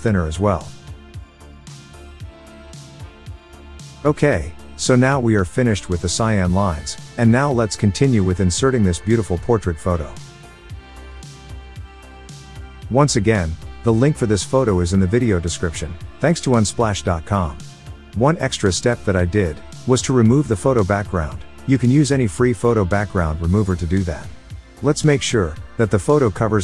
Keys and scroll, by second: 3.2 Return.